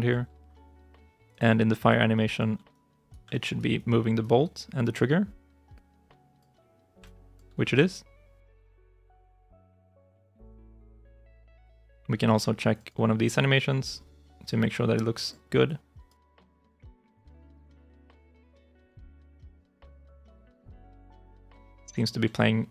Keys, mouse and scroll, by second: 1.2 double click, 1.8 alt+click, 2.6 right click, 3.2 alt+right click, 4.3 alt+click, 6.9 alt+click, 9.5 ctrl+shift+s, 10.6 ctrl+shift+s, 12.7 double click, 15.5 alt+click, 16.4 alt+right click, 16.9 right click, 17.1 right click, 17.2 alt+click, 17.5 alt+right click, 18.5 alt+i, 18.6 alt+right click, 18.8 alt+click, 20.0 alt+click, 21.7 alt+right click.